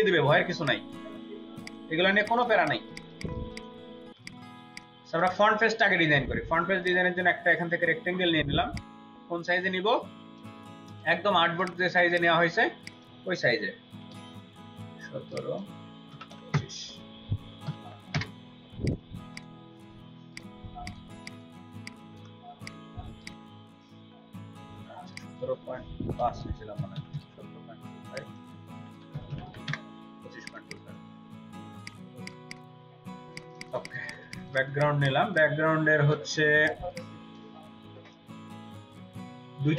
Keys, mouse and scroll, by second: 2.3 ctrl+space, 2.9 ctrl+double click, 2.9 ctrl+space, 3.5 ctrl+alt+click, 4.1 ctrl+alt+click, 4.5 space, 5.1 double click, 10.9 v, 13.9 typing, 16.1 typing, 17.7 typing, 18.1 Return, 20.9 ctrl+space, 21.1 ctrl+click, 21.9 space, 26.1-27.1 typing, 28.7-29.5 typing, 29.7 Return, 30.7 double click, 33.1 ctrl+space, 33.3 ctrl+alt+click, 33.5 ctrl+alt+double click, 33.7 ctrl+alt+double click, 33.9 ctrl+alt+click, 34.7 ctrl+alt+click, 35.1 space, 36.3 ctrl+space, 36.5 ctrl+click, 37.3 space, 39.3 space.